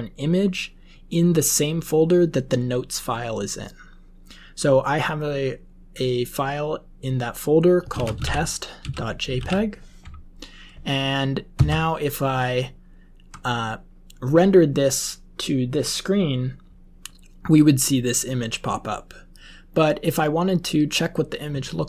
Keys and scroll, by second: 7.6-9.8 typing, 11.5 Right.